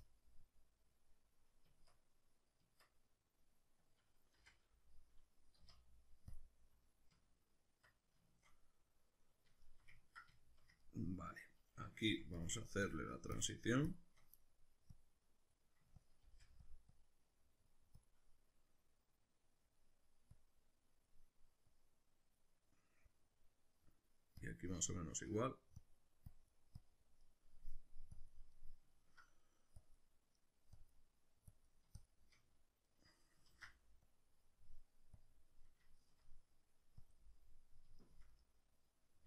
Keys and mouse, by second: 0.4-8.3 drag, 1.7 Tab, 4.4 x, 5.6 z, 7.1 Tab, 8.3-12.8 shift+middle drag, 12.1 f, 12.8-14.4 shift+drag, 14.4 middle click, 14.9 click, 15.9 ctrl+middle click, 16.2 f, 17.0-18.5 drag, 18.5 middle click, 19.6 middle click, 20.4-22.6 drag, 22.6-24.4 middle drag, 24.4 click, 24.8-25.8 shift+middle drag, 25.8-27.2 drag, 27.2 middle click, 28.2 click, 28.5-29.8 middle drag, 29.8 click, 30.4 middle click, 30.8-32.9 drag, 32.9-34.0 middle drag, 33.5 ctrl+z, 34.0 click, 34.5 middle click, 35.2 click, 35.9-37.0 shift+middle drag, 37.0 click, 37.4-39.2 middle drag.